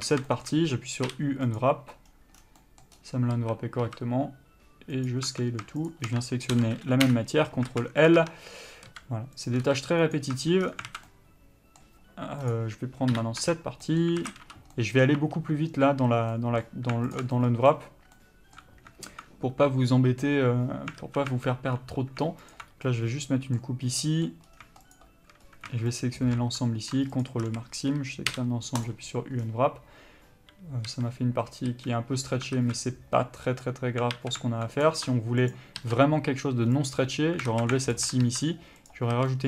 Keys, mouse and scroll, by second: 0.1 scroll down 1, 0.2 a, 0.5 shift+middle click, 1.8 u, 3.6 a, 4.0 s, 5.5 Tab, 6.1 shift+click, 7.3 Return, 7.9 alt+a, 8.3 click, 8.4 Tab, 9.1 s, 9.6 click, 9.8 s, 10.5 Tab, 10.8 scroll down 1, 11.1 alt+a, 11.3 middle click, 12.7 click, 13.3 KP_Divide, 13.6 Tab, 14.0 middle click, 14.4 alt+a, 15.0 middle click, 15.4 2, 16.5 middle click, 17.3 alt+click, 17.6 middle click, 21.2 alt+a, 22.7 alt+click, 23.1 middle click, 24.7-25.2 scroll up 1, 25.2 shift+click, 25.6-26.2 scroll up 1, 26.2 alt+shift+click, 27.4 ctrl+e, 27.6 a, 29.1 u, 31.1 a, 32.7 alt+a, 33.4 middle click, 34.3 alt+a, 35.0 click, 35.7 ctrl+click, 37.1 ctrl+e, 37.7 alt+a, 38.1 alt+click, 39.1 ctrl+e, 39.3 a.